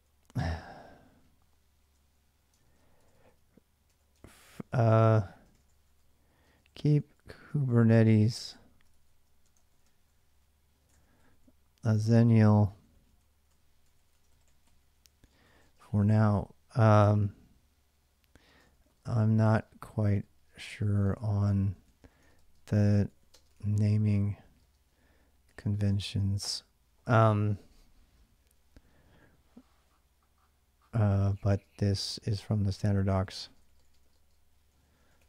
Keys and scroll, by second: 0.3 typing, 1.6 Return, 2.3-16.3 typing, 18.2-26.3 typing, 30.6-35.2 typing.